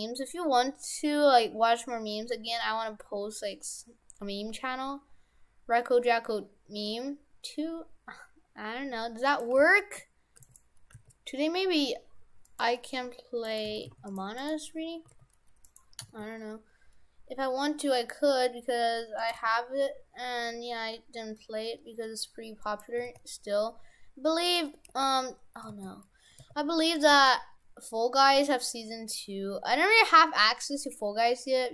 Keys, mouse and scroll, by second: 9.5 g, 10.9 g, 13.5 right click, 13.7 shift+f, 14.4 right click, 15.1 s, 16.0 s, 19.4 g, 23.1 s, 24.7 h, 24.9 u, 25.7 ctrl+z, 26.4 g, 27.1 g.